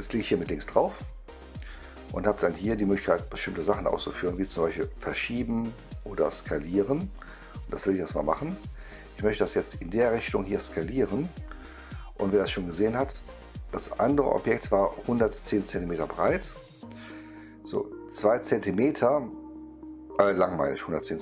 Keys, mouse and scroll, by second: 6.9 click, 9.1-13.9 drag.